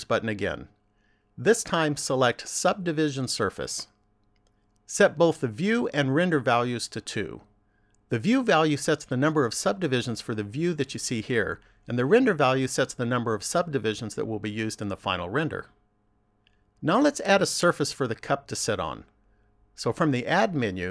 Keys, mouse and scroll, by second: 5.6 click, 20.1 click.